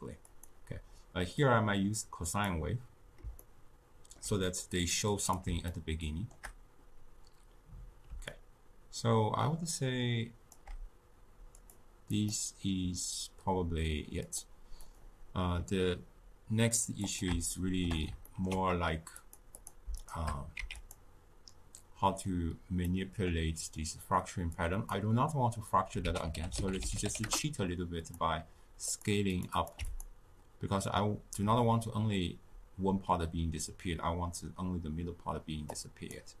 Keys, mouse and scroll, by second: 0.3-1.4 drag, 3.4-5.2 shift+middle drag, 5.2-5.7 drag, 5.7-8.2 shift+middle drag, 8.2-11.3 shift+drag, 11.5-17.2 drag, 17.5-19.1 shift+middle drag, 19.1 click, 19.5 click, 19.9 shift+click, 20.5 x, 22.8-24.5 middle drag, 24.5 click, 26.0 ctrl+a, 28.8 click, 29.5 click, 35.7-36.4 drag.